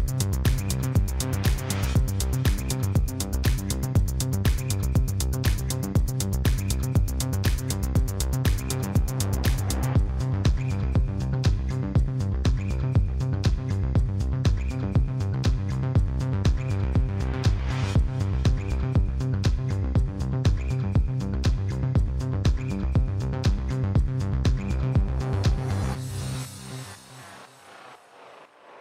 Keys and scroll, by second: 8.9 w, 9.1 a, 9.5 l, 10.6 s, 10.8 Return, 18.4 e, 19.8 c, 20.1 0, 21.3 e, 21.8 Return.